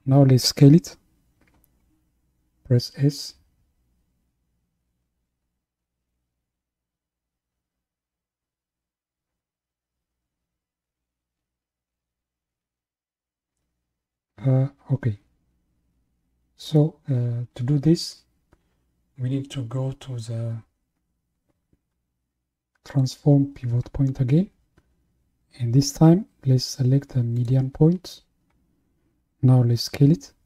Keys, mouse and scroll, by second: 2.1-3.2 scroll up 1, 3.2 s, 22.9 click.